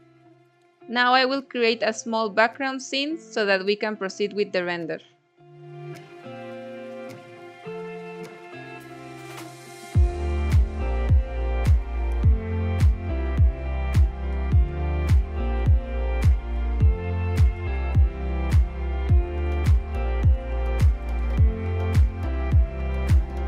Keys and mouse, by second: 1.6 click, 3.6 middle click, 4.9-6.2 typing, 5.2 middle click, 7.4 middle click, 7.6 Tab, 7.8 2, 8.2 e, 8.3 z, 9.1 click, 9.4 Tab, 9.8 ctrl+2, 10.0 ctrl+3, 10.3 Tab, 10.7 ctrl+r, 12.3 Tab, 12.5 click, 13.1 middle click, 13.5 s, 13.7 x, 14.0 click, 14.4 click, 14.6 shift+click, 14.9 click, 15.3 ctrl+alt+KP_0, 16.0 g, 16.1 z, 18.7 click, 19.2-20.3 drag, 20.7 click.